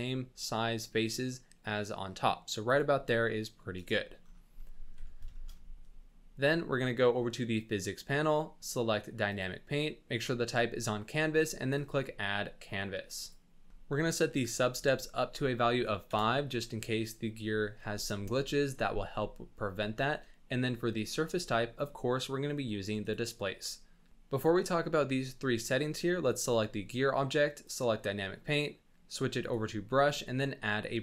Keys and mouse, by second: 4.6 click, 5.0 Tab, 5.3 shift+click, 5.5 drag, 7.6 click, 9.3 click, 11.7 click, 14.5 click, 20.9-23.1 drag, 27.6 click, 28.7-29.5 drag, 29.9 click.